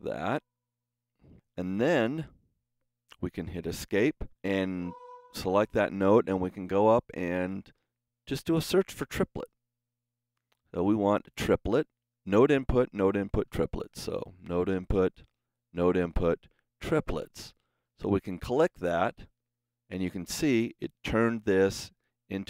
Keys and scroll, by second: 3.6 Escape, 9.5-10.7 typing.